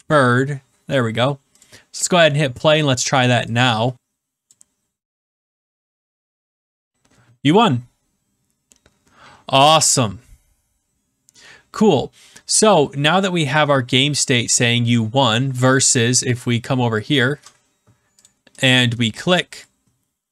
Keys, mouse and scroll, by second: 1.6 click, 4.4 click, 15.6 click, 17.3 click, 18.2 click.